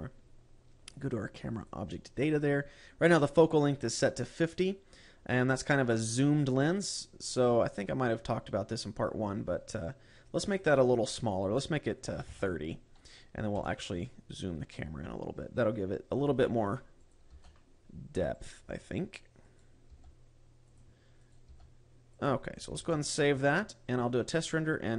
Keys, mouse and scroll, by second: 2.0 click, 11.0 click, 14.0 g, 16.6 click, 16.8 g, 17.6 click, 17.8 g, 18.9 click, 20.0 right click, 20.4 g, 21.3 click, 21.8 right click, 22.0 g, 22.8 click, 23.4 ctrl+s.